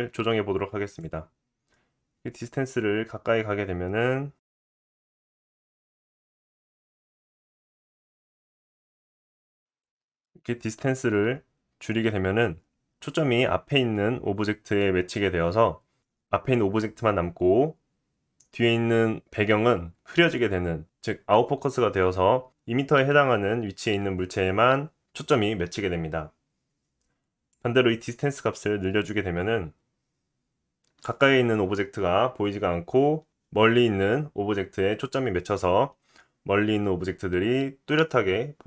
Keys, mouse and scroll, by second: 4.7-7.7 typing, 5.9-8.8 middle drag, 8.8-38.6 drag.